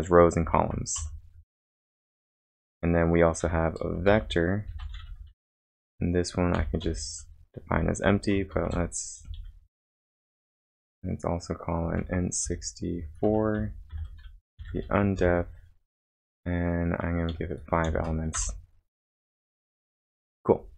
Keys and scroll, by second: 0.0-0.7 typing, 1.0 Up, 1.4 Down, 1.9-6.8 typing, 8.6 shift+{, 9.9-17.9 typing, 18.3 Return.